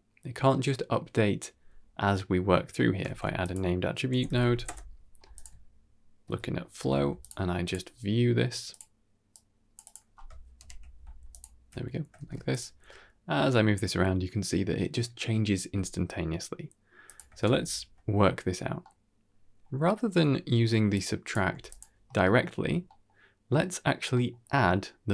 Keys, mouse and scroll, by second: 2.6 middle click, 2.9 shift+a, 6.1 ctrl+c, 6.6 ctrl+v, 7.1 ctrl+shift+drag, 8.6-9.8 drag, 10.5 shift+Left, 11.2 ctrl+shift+click, 12.1 shift+space, 12.4 click, 12.6 g, 17.3 shift+space, 18.7 middle click, 19.5-19.8 scroll down 2, 19.7 middle click, 20.8 click, 21.4 g, 22.1 middle click, 22.5-23.0 scroll up 3, 22.7 middle click, 23.4 middle click, 24.0 middle click.